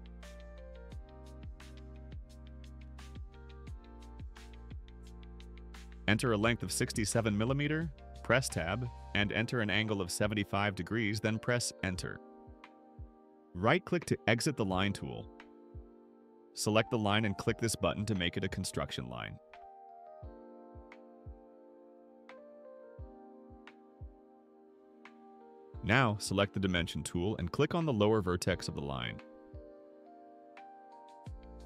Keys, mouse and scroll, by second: 1.1 right click, 6.3-7.3 typing, 7.6 Tab, 8.9 7, 9.3 5, 11.1 Return, 13.3 right click, 16.5 click, 22.7 click, 30.1 click, 30.9 right click.